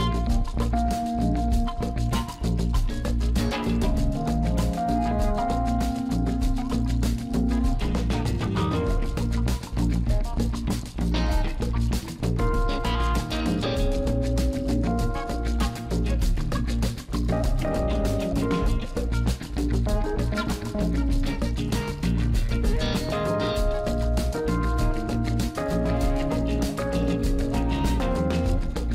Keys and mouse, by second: 1.0 KP_0, 2.8 click, 3.0 click, 4.0 click, 4.2 Tab, 4.7 click, 9.5 click, 10.2 click, 12.2 click, 15.8 click, 26.1 click, 27.7-28.8 drag.